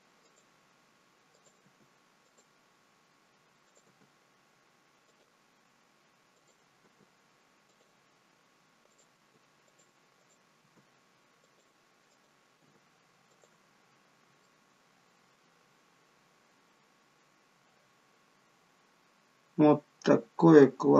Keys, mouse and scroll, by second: 1.2 click, 1.5 g, 3.6 click, 3.7 g, 6.2 click, 6.8 g, 8.8 click, 9.0 g, 10.1 click, 10.6 g, 12.0 click, 12.5 g, 13.6-14.3 scroll down 2, 14.3 middle click.